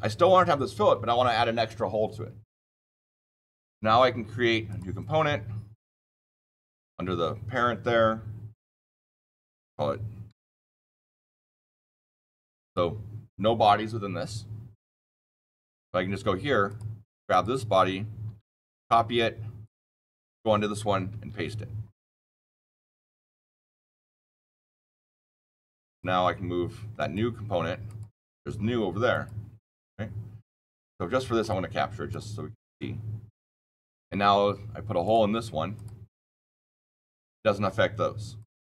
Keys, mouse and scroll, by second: 4.6 click, 8.6 click, 10.0-11.0 typing, 12.5 click, 15.6 click, 16.6 click, 17.2 click, 18.7 ctrl+c, 19.5 click, 21.0 ctrl+v, 24.0 click, 25.1 click, 25.9 click, 27.8 click, 29.0 click, 31.3 click, 32.0 click, 34.9 click, 35.7 click, 36.9 click, 38.3 click.